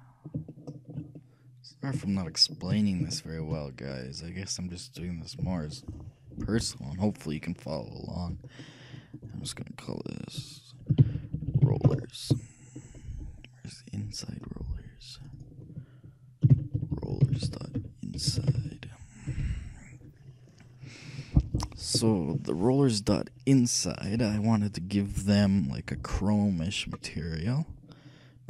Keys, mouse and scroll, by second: 9.1-11.1 drag, 11.6 l, 14.7 middle click, 15.4-17.3 drag, 17.2 l, 25.4-28.4 drag.